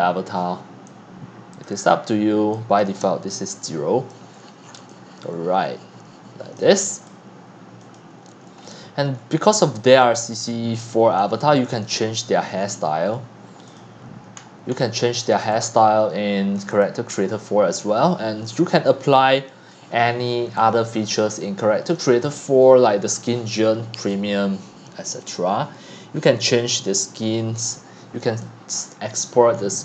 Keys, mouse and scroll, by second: 1.0 click, 3.3 0, 4.3-4.8 scroll down 15, 4.8 x, 5.2 c, 6.5 drag, 6.8 x, 7.1-8.6 drag, 8.7-9.1 scroll up 8, 9.1-9.9 scroll down 7, 10.0-11.5 typing, 11.1 click, 11.8 click, 12.0 click, 12.6-13.6 scroll, 13.8 click, 14.4-14.9 scroll, 15.5 click, 16.6 click, 16.8 click, 17.7 scroll down 6, 18.2 click, 18.4 typing, 19.2 right click, 19.8 click, 19.9 click, 20.5-21.5 typing, 20.9 right click, 22.0-24.3 drag, 24.3 right click, 24.5-29.2 drag, 29.2 scroll down 3, 29.5 scroll.